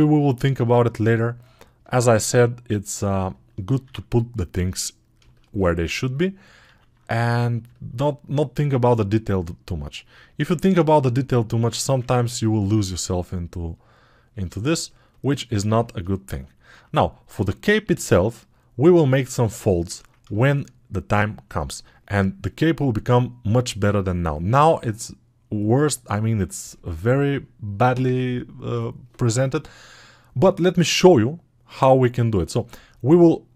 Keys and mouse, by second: 5.0 alt+shift+click, 6.8 alt+q, 6.8-19.9 drag.